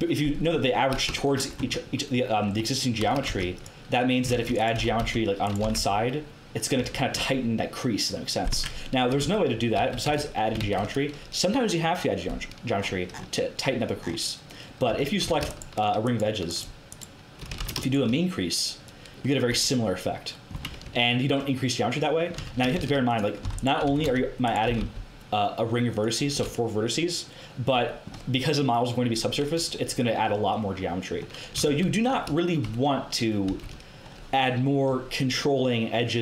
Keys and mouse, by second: 1.5 Tab, 2.9 a, 3.2 ctrl+r, 4.3 ctrl+r, 4.8 g, 5.6 g, 6.8 Tab, 8.5 Tab, 9.2 ctrl+z, 9.7 ctrl+z, 10.0 ctrl+z, 10.5 ctrl+z, 14.8 a, 15.2 a, 17.5 ctrl+z, 19.4 Tab, 20.5 Tab, 22.3 a, 22.7 ctrl+r, 23.8 g, 24.6 g, 29.7-31.0 middle drag, 31.6 ctrl+z, 33.4 ctrl+z, 33.9 middle click.